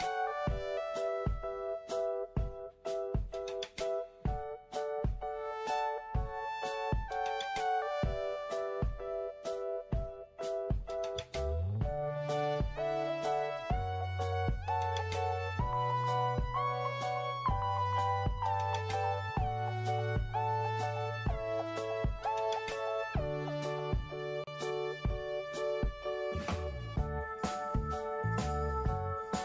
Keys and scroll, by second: 0.9 6, 2.6-4.0 typing, 15.4-17.6 typing, 24.2 alt+f.